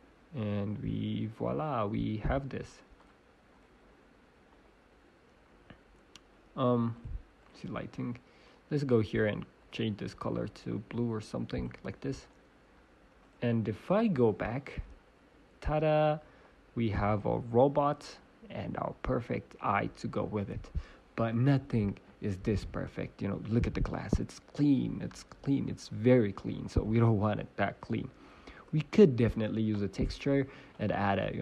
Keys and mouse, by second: 0.8 click, 3.0 click, 3.9-4.9 drag, 7.3 click, 7.9-8.9 middle drag, 9.0-10.4 middle drag, 10.4 click, 13.2-14.2 middle drag, 14.1 /, 14.2 click, 14.5 middle click, 20.6-23.0 middle drag, 26.0 middle click, 30.7-31.4 drag.